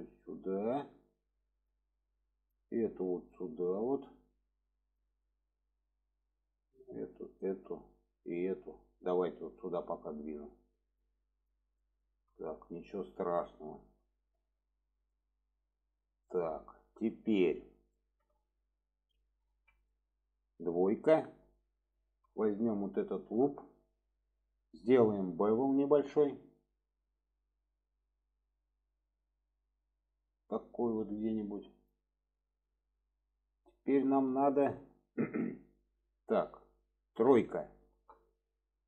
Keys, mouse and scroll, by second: 0.3-1.7 drag, 2.2 click, 3.0-5.0 drag, 5.2 shift+middle drag, 6.5 click, 7.3 shift+click, 8.2 shift+click, 9.0-11.1 drag, 11.4 click, 11.8 shift+middle drag, 13.6 middle click, 14.3-15.0 middle drag, 15.1-15.7 middle drag, 16.2-17.1 middle drag, 17.9 shift+middle click, 19.9 middle click, 21.1 2, 23.8-24.4 middle drag, 27.1-30.6 drag, 32.2 middle click, 33.0-33.3 middle drag, 34.2 shift+middle click, 35.0 middle click, 37.8 middle drag, 38.7 drag.